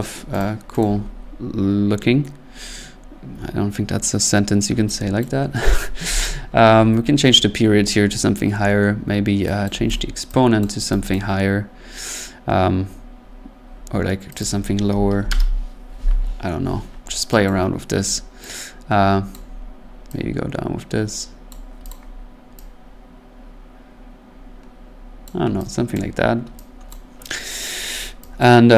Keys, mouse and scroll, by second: 0.4 click, 0.8 click, 5.2 click, 6.0 4, 6.2 click, 9.6 click, 9.7 1, 9.9 click, 10.6 click, 11.1 click, 12.9 typing, 14.4 click, 14.8-15.6 typing, 17.5 click, 19.3 click, 21.4 click, 21.9 click, 25.2 click, 25.9 click, 26.9 click, 28.4 click.